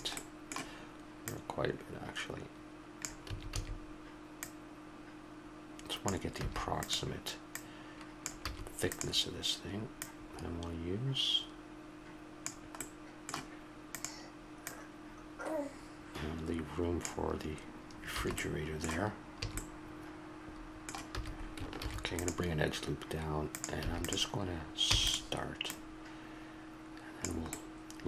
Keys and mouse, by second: 0.2 middle click, 0.2-2.9 drag, 2.9 right click, 3.3 a, 3.5 a, 4.4-6.0 drag, 6.4 a, 8.5 a, 12.8-13.9 middle drag, 13.9-16.7 right drag, 18.1 a, 18.7-20.5 middle drag, 19.4 a, 21.8 ctrl+r, 23.8 a, 24.0 click, 24.8 e, 25.3-27.6 drag, 27.6-28.0 middle drag.